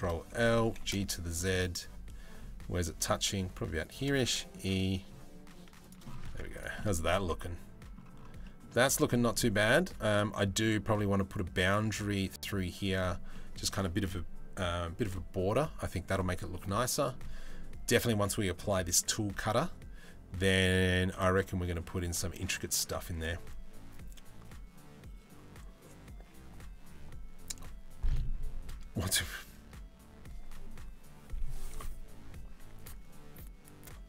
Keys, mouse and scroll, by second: 0.3 g, 3.9 e, 6.0 Tab, 6.4-7.6 middle drag, 8.1 middle click, 8.5 click, 8.8 middle click, 9.1 Tab, 9.7 Tab, 10.0 middle click, 12.9 middle drag.